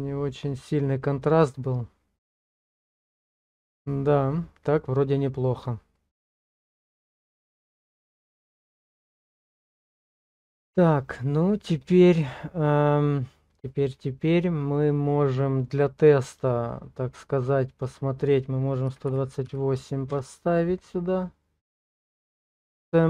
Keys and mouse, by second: 17.8-20.2 drag.